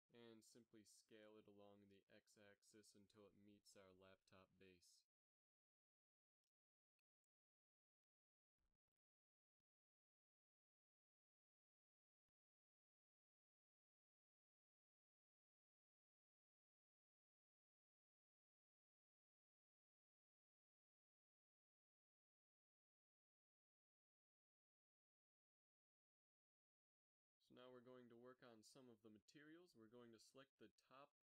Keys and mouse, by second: 0.4 b, 2.6 s, 5.8 z, 7.1 s, 9.8 a, 11.2 Tab, 13.7 ctrl+s, 14.3-14.7 middle drag, 15.2 KP_3, 17.3 g, 19.7 a, 22.9-25.0 middle drag, 26.6-28.1 drag, 28.1 Tab, 29.0 KP_3, 29.3 z, 30.8 a, 31.1 a.